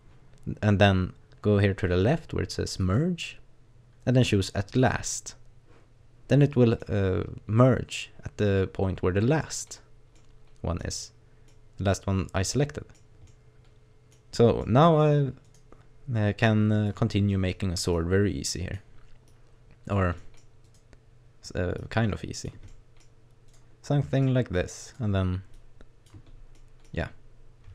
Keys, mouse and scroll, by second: 2.8 click, 6.4 middle click, 7.6 middle click, 8.9-9.4 scroll down 1, 9.4 middle click, 9.8 scroll down 1, 10.2 middle click, 10.9-11.5 scroll down 2, 11.5 middle click, 13.3 middle click, 14.1-14.7 scroll down 2, 14.7 middle click, 15.5 right click, 15.8-16.5 scroll up 1, 16.5 click, 17.1 scroll down 1, 17.3 middle click, 18.0 click, 19.3 click, 20.2 middle click, 20.7 right click, 21.8 click, 22.7 middle click, 23.5 right click, 24.1 middle click, 24.9 right click, 25.6 click, 26.3 scroll down 3, 26.6 middle click.